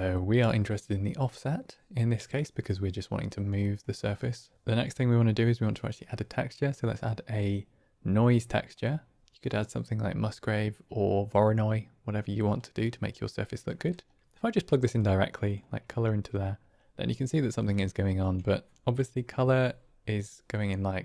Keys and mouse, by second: 0.9 click, 3.6 middle click, 9.2 click, 12.8 click, 13.8 click, 14.9-15.4 drag, 17.6 middle drag, 17.8 click.